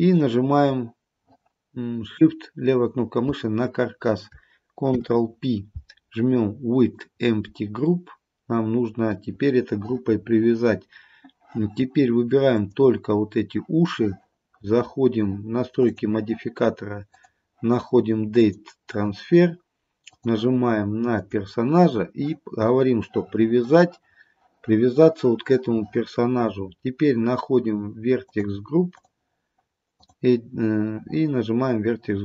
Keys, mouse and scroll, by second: 0.2 shift+click, 4.9 ctrl+p, 8.0 middle click, 12.6 click, 15.9 click, 17.1 click, 20.2 click, 27.2-28.3 scroll down 2, 28.3 click, 28.9 click, 30.1 click.